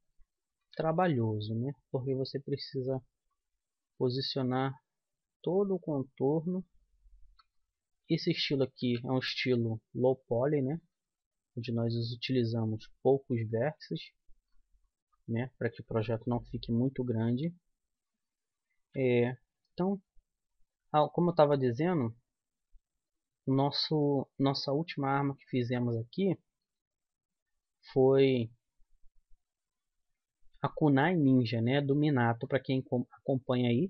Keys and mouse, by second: 0.6 e, 3.8-5.6 right drag, 4.7-6.5 drag, 7.3-8.8 right drag, 8.8 g, 10.9 g, 15.3 right click, 16.0-19.5 middle drag, 19.5 e, 24.8 click, 26.6 g, 26.6 click, 26.7 right click, 27.3 click, 30.7-32.1 right drag, 31.2 g, 32.1 middle click, 32.5 click, 33.0-33.8 drag.